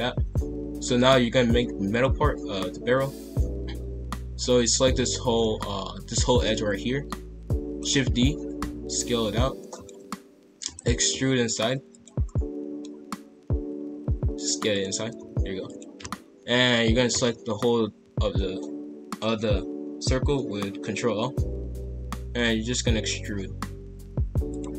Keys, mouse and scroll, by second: 0.8-2.0 drag, 5.4-7.6 middle drag, 7.6 shift+d, 8.5 s, 10.0 KP_5, 10.6 e, 11.0 s, 12.2-13.9 middle drag, 13.9 s, 15.6 alt+click, 17.1 ctrl+l, 21.2 KP_5, 22.3 e.